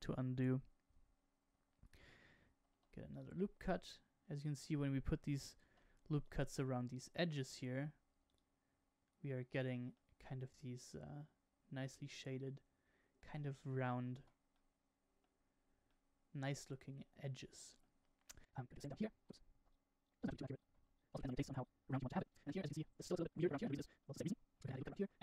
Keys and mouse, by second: 2.6 ctrl+r, 5.6 ctrl+r, 7.7 ctrl+r, 9.9-13.3 middle drag, 14.2 Tab, 14.5-15.1 middle drag, 15.8-17.7 middle drag, 18.4 shift+middle click, 18.9 Tab, 19.0 r, 19.5 ctrl+r, 20.2 ctrl+r, 20.8 ctrl+r, 21.5 ctrl+r, 22.1 middle click, 22.3 middle click, 22.4 middle click, 22.8 Tab, 22.8 middle click, 23.2 middle click, 23.7 shift+middle click, 24.0 shift+middle click, 24.2 Tab, 24.5 ctrl+r, 25.0 Tab, 25.1 middle click.